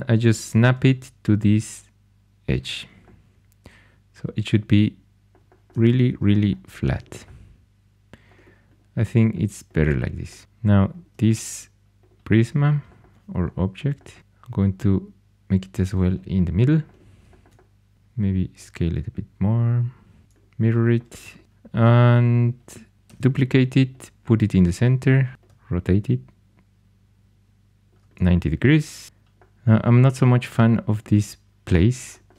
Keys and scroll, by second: 14.2 g, 17.9 s, 20.2 alt+x, 23.0 shift+d, 25.3 r.